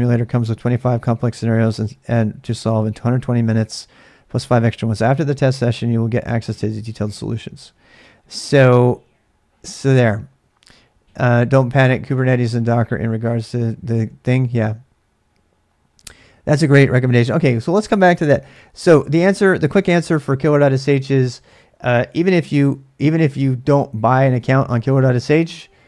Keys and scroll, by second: 22.1 ctrl+a, 22.2 ctrl+a.